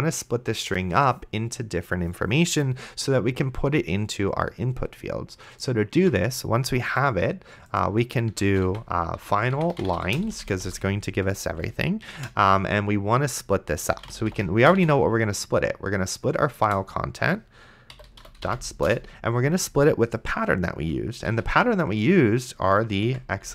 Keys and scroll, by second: 6.2 Tab, 9.5-12.3 typing, 13.7-15.6 typing, 16.6 Return, 17.7-19.2 typing, 21.3 ;, 22.8-23.5 typing.